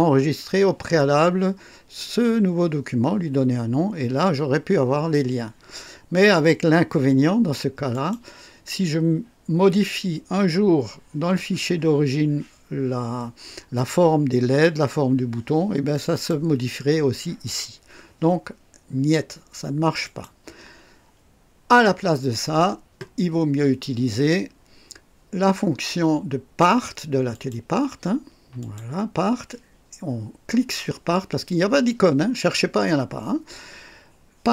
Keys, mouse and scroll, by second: 7.9 click, 16.1 click, 20.0 click, 27.3 click, 28.6 click.